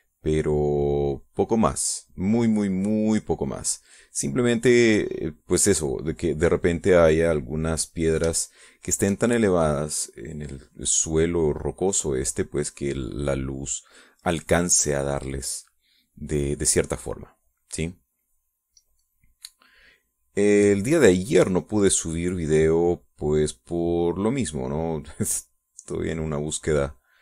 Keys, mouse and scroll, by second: 0.6-4.0 drag, 4.3-5.3 drag, 5.4 click, 6.8 click, 7.8 click, 9.1 shift+click, 10.0 shift+click, 10.9 shift+click, 11.7-12.7 shift+drag, 12.8-14.7 drag, 15.0 middle click, 15.6-16.9 middle drag, 17.8-19.0 drag, 19.1-20.1 drag, 20.3-21.7 drag, 21.9-23.0 drag, 23.2 click, 24.8-26.0 drag, 26.3 click.